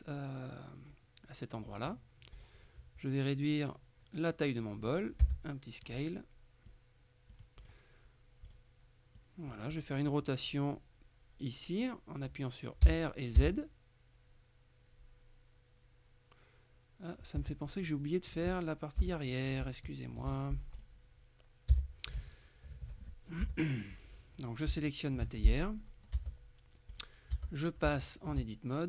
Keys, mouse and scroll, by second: 2.4 right click, 5.3 s, 6.0 click, 6.8-8.3 drag, 7.7 right click, 8.5 right click, 9.3-10.4 drag, 9.8 right click, 12.9 r, 13.5 z, 17.5 Escape, 17.9 click, 19.1 KP_3, 20.0 shift+middle click, 20.3-20.9 shift+scroll up 1, 20.9 right click, 21.8 h, 22.2-23.5 shift+middle drag, 23.5 KP_3, 24.5 right click, 24.8 shift+click, 26.2 Tab, 27.0 right click, 27.4 Tab, 28.0 shift+middle click.